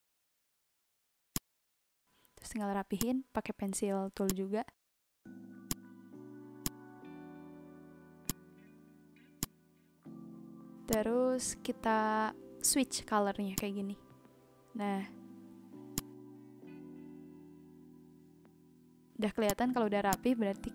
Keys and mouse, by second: 1.3 click, 2.9 click, 4.2 click, 5.6 click, 6.6 click, 8.2 click, 9.3 click, 10.9 click, 13.5 click, 15.9 click, 16.6 v, 19.4 click.